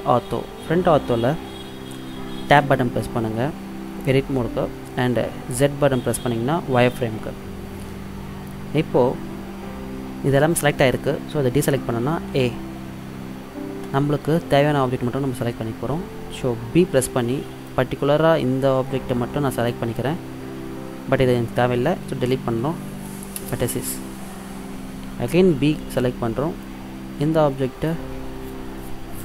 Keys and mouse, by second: 2.7 Tab, 6.9 z, 12.4 a, 16.7 b, 22.8 Delete, 25.4 b.